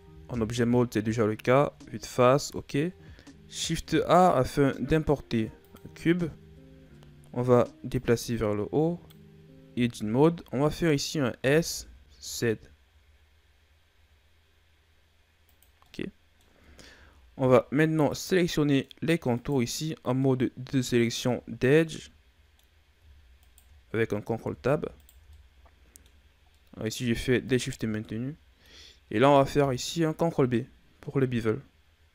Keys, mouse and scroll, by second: 0.2 KP_1, 3.5 shift+a, 6.4-7.8 shift+scroll up 5, 7.8 click, 9.6 Tab, 11.3 s, 15.8 middle click, 16.6-16.9 shift+scroll down 5, 16.9-17.7 scroll up 3, 17.7-18.2 scroll up 2, 18.2-19.2 middle drag, 19.2 right click, 20.1-21.5 middle drag, 21.5 shift+right click, 21.8 middle click, 22.6-23.3 scroll up 1, 23.3 shift+right click, 24.3 ctrl+z, 24.9 shift+right click, 25.2 middle click, 26.2 scroll up 1, 26.4 middle click, 27.3 shift+right click, 27.7 scroll down 2, 27.9-30.1 middle drag, 30.1 ctrl+b.